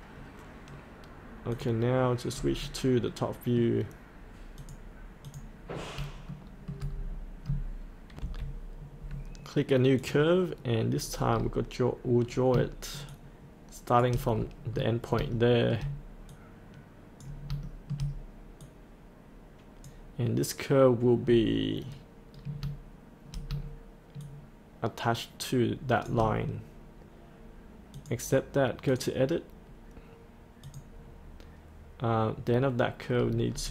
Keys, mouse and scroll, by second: 2.3-3.1 scroll up 1, 3.1 middle click, 4.6 click, 6.3 shift+middle click, 6.9-8.1 scroll down 1, 8.1 F8, 8.7-10.0 scroll down 1, 10.0 click, 11.0-11.3 scroll down 1, 13.1 shift+click, 14.3-15.2 scroll up 1, 15.3 shift+middle click, 16.3 click, 17.6 shift+middle click, 18.6 click, 19.0-20.1 drag, 21.2 scroll down 1, 24.2 shift+click, 27.9 click, 33.1 scroll up 1.